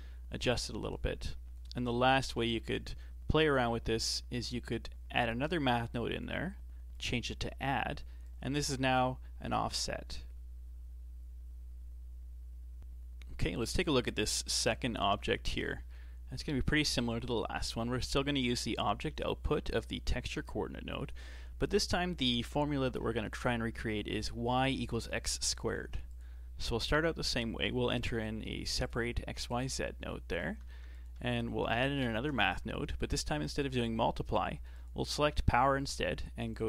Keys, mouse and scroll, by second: 0.5 click, 1.3 click, 2.2 shift+d, 6.1-11.3 drag, 15.9-18.9 shift+middle drag, 25.8 shift+a, 30.1 shift+middle click, 30.7 shift+a, 34.3 click, 34.7-36.5 drag.